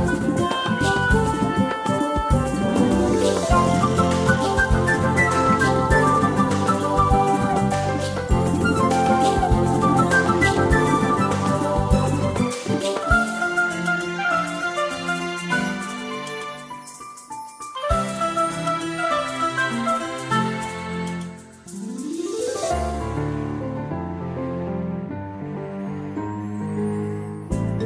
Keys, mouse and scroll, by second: 1.0 shift+click, 2.4 click, 6.3 click, 11.4 click, 19.0 space, 19.6-20.0 ctrl+scroll up 1, 21.4 ctrl+scroll up 1, 23.0 click, 23.9 shift+click.